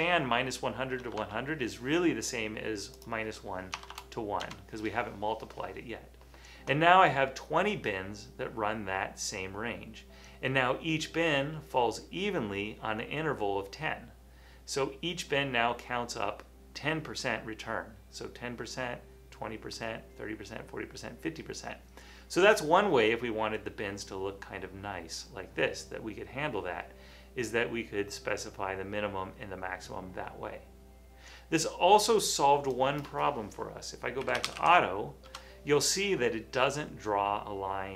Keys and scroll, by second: 1.1 BackSpace, 1.2 BackSpace, 3.9 BackSpace, 4.4 Return, 34.1-35.1 typing, 35.3 Return, 36.4 typing.